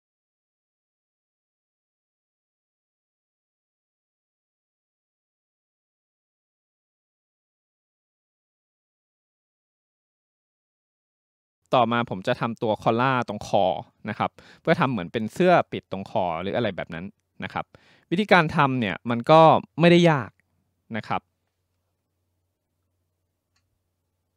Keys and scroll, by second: 0.3 ctrl+z, 8.5 ctrl+z.